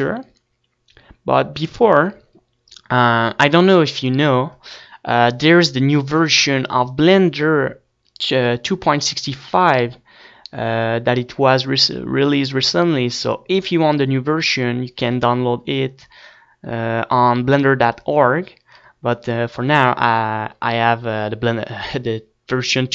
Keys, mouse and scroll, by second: 20.1-21.1 middle drag.